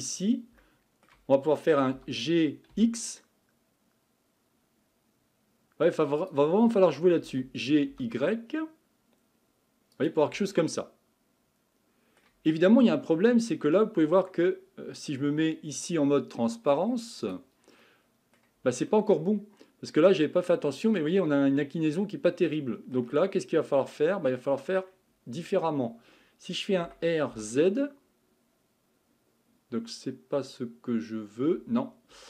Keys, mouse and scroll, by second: 0.2-0.6 scroll down 1, 0.6-2.0 shift+middle drag, 2.0 g, 7.2 g, 10.6-12.5 middle drag, 12.5-13.5 scroll up 3, 13.5-17.2 middle drag, 17.2 click, 17.8-23.4 middle drag, 23.4-24.4 scroll down 2, 24.4 middle click, 25.1-25.7 scroll up 2, 25.7-26.1 scroll down 1, 26.8 r.